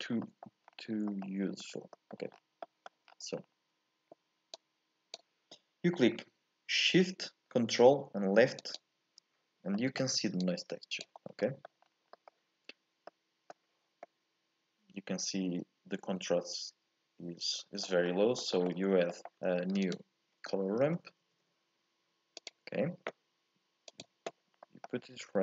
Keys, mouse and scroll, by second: 0.1-1.1 scroll up 3, 0.2 middle click, 1.1 middle click, 1.6-1.9 scroll up 2, 1.9 middle click, 2.3 scroll down 4, 2.6 middle click, 3.1 scroll down 1, 3.3-4.3 scroll up 4, 4.3 scroll up 1, 4.5-7.6 drag, 8.7 ctrl+shift+click, 9.7 middle click, 10.4 click, 11.3 scroll up 1, 11.4 middle click, 11.9 scroll down 1, 12.1 scroll up 1, 12.1-17.0 middle drag, 18.0-18.4 scroll down 1, 18.4 shift+middle click, 18.7-19.1 scroll up 2, 19.1 middle click, 19.5 shift+a, 24.5 scroll up 1, 24.6 middle click, 25.0-25.4 scroll down 1.